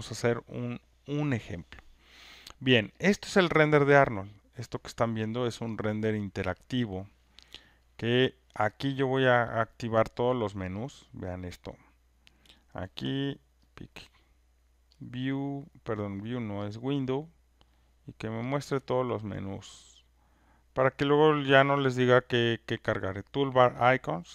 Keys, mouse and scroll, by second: 3.0 click, 6.7 click, 7.9 click, 9.6 click, 10.9 click, 13.7 click, 15.0 click, 16.1 click, 16.7 click, 18.6 click, 19.7 click.